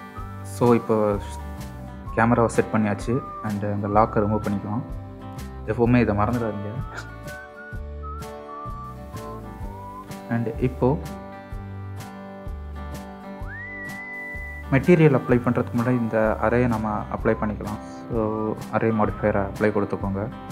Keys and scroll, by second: 2.6 n, 12.0 n.